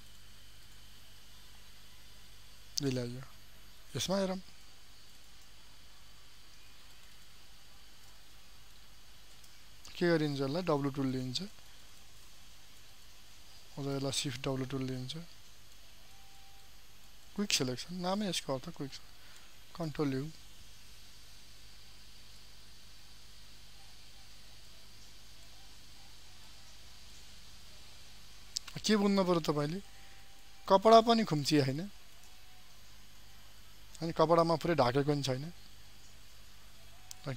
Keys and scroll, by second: 3.9 ctrl+space, 6.8 ctrl+alt+space, 19.9 ctrl+u, 30.7 ctrl+space, 33.6 ctrl+d.